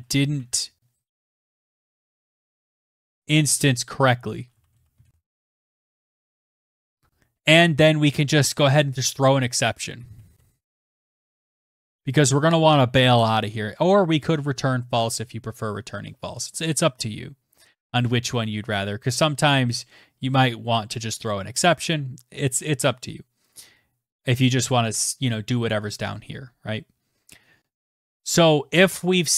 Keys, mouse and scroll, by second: 1.0-5.9 typing, 8.4-12.3 typing, 15.5-16.4 scroll down 4, 16.8-17.3 scroll, 22.2 click, 26.6 Return, 26.7 Return.